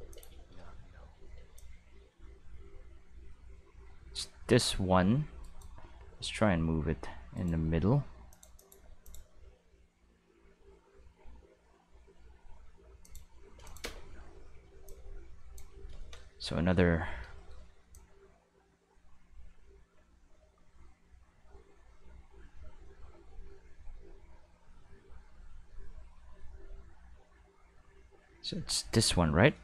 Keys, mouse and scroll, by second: 0.0 space, 0.1 click, 0.3 space, 1.4 space, 1.6-4.7 drag, 5.4 shift+right click, 6.0 g, 8.3 click, 8.6 click, 9.0 click, 9.4 g, 12.0-13.0 middle drag, 13.0 click, 13.6 click, 13.8 space, 14.7 space, 14.9 click, 17.9-28.9 drag.